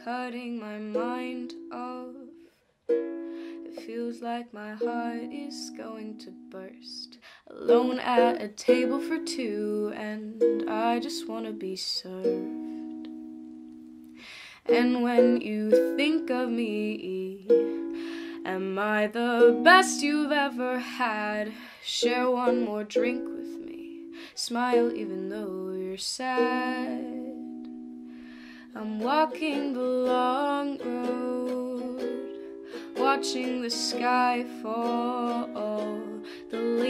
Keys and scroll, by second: 12.1 s, 19.0-21.0 typing, 22.6-23.9 typing, 25.1 s, 25.9 v, 28.1 s, 28.2 s, 29.8 ctrl+d, 29.9-32.7 typing, 36.0 ctrl+d, 36.5-36.8 typing.